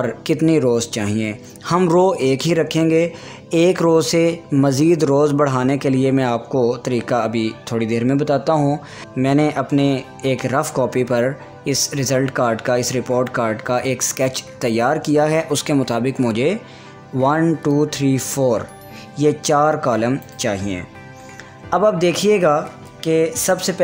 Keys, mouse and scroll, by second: 22.0 click.